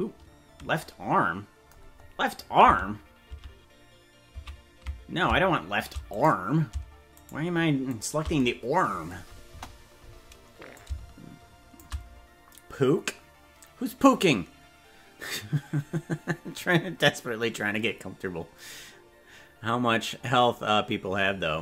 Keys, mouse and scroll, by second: 2.0 scroll up 5, 3.4 ctrl+z, 4.6 ctrl+z, 6.2 right click, 7.4 shift+right click, 8.0 right click, 9.6 KP_0, 10.8-11.8 shift+drag.